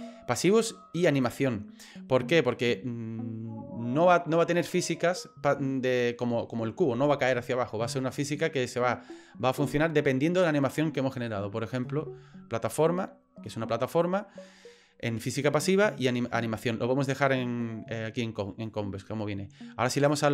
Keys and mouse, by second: 1.2 click, 20.1 click.